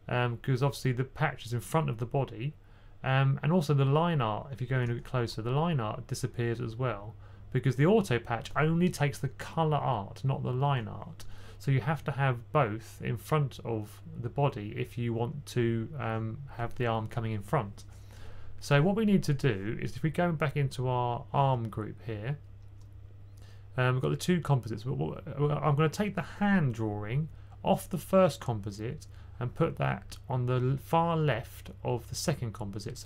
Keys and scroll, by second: 4.4 2, 4.5 2.